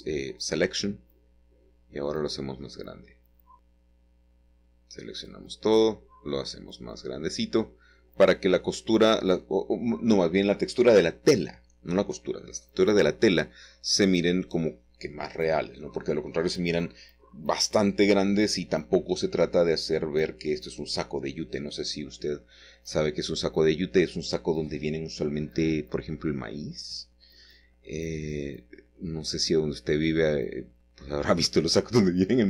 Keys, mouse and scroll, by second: 1.4-2.7 middle drag, 3.1 shift+middle click, 5.4 click, 6.2 Tab, 6.9 click, 8.3 shift+middle click, 9.0 shift+middle click, 9.9 Tab, 10.9 a, 14.3 s, 16.0 a, 18.6 click, 19.3-20.2 scroll up 1, 20.6 s, 21.5 click, 22.5 Tab, 23.3 click, 23.3-25.4 typing, 24.0 Tab, 26.4-26.9 typing, 29.9 click, 30.4-30.9 scroll up 2, 30.9 scroll down 4, 32.3 ctrl+middle click.